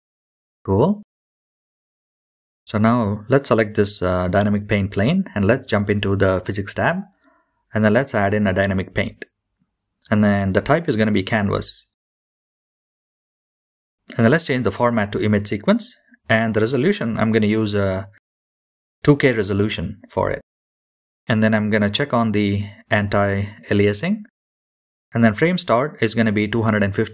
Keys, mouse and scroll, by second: 0.8-1.9 drag, 4.8 click, 6.7 click, 9.8 click, 10.8-12.5 scroll down 5, 12.5-14.0 drag, 14.7-15.9 scroll down 2, 15.9-20.1 drag, 22.8-24.0 scroll down 1, 24.0-27.1 drag.